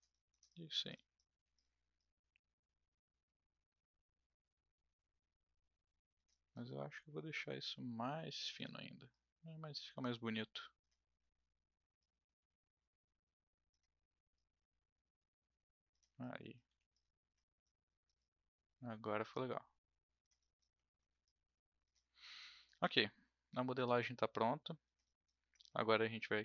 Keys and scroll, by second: 1.3 w, 11.2 r, 16.6 w.